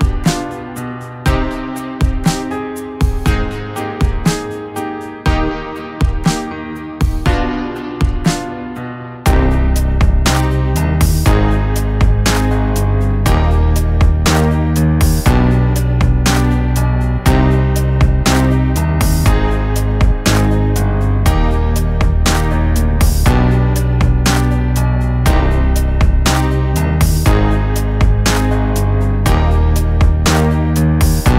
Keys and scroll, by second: 0.7 g, 6.5 g, 7.9 g, 11.1 g, 14.4 g, 22.8 g, 25.7 g.